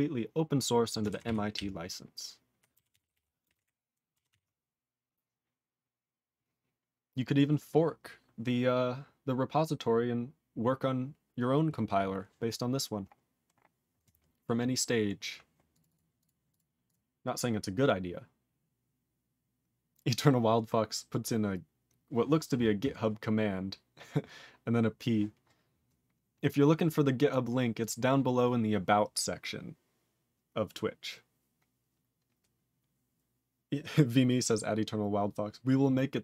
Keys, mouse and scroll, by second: 1.2 ctrl+s, 1.5-2.6 ctrl+p, 2.9 ctrl+s, 3.0 ctrl+p, 3.4 ctrl+space, 3.4 ctrl+e, 3.5 ctrl+g, 4.3 ctrl+s, 12.0-14.2 scroll up 15, 14.2-15.2 scroll down 18, 15.7 click, 15.8 click, 15.8 double click, 15.9 double click, 16.2 click, 16.2 click, 16.5 click, 16.5 click, 16.8 click, 16.9 click, 27.1 click, 27.3 click, 27.8 click, 27.8 click.